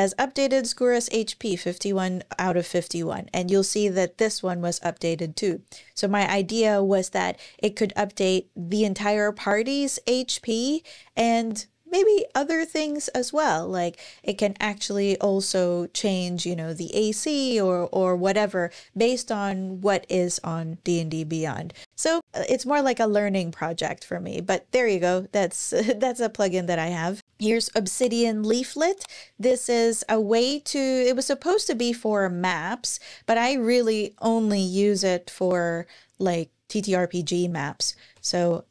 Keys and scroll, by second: 22.2 super+,, 37.6 ⟲.